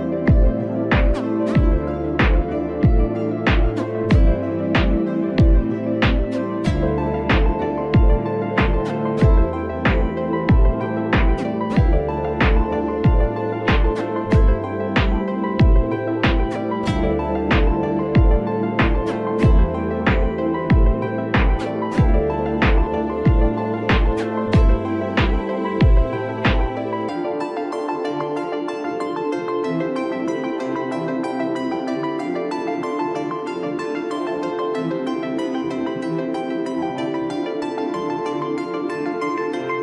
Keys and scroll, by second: 0.9 ctrl+j, 27.3 ctrl+t, 33.1 ctrl+t, 39.4 ctrl+l.